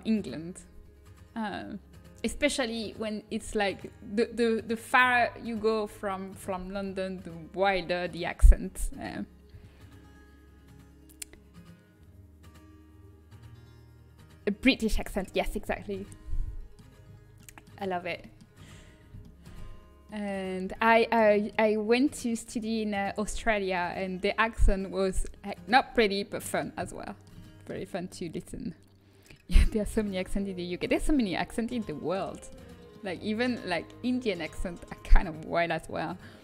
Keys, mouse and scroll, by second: 0.7-7.2 middle drag, 16.1 middle click, 25.6-29.6 middle drag, 30.5-35.8 middle drag.